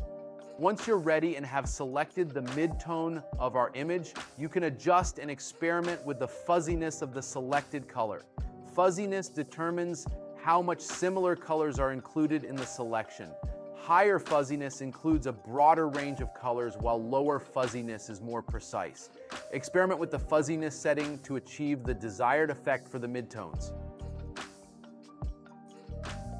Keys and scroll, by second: 5.4 space, 9.6 space.